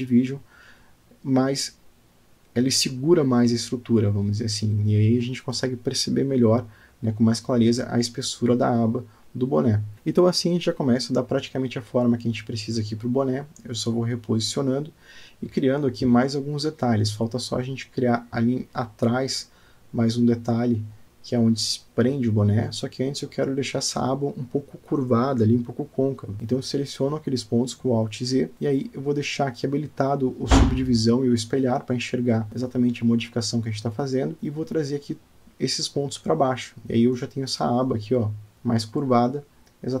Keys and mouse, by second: 5.9-9.3 middle drag, 9.9-12.3 middle drag, 12.7 alt+middle click, 14.2 g, 19.1 click, 20.1-21.9 middle drag, 22.1 click, 22.9 Tab, 23.5 middle click, 24.9-26.0 drag, 26.4 middle click, 27.1 Tab, 28.7 Tab, 29.6 click, 30.2 click, 31.2 click, 31.5 click, 32.9 g, 34.4 o, 34.8 g, 38.7 Tab, 39.2-40.0 middle drag.